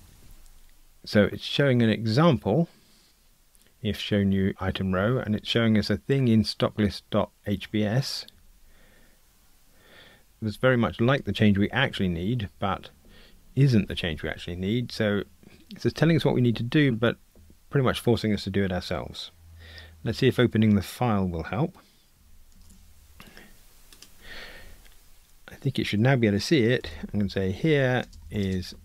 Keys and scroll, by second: 22.7 shift+super+a.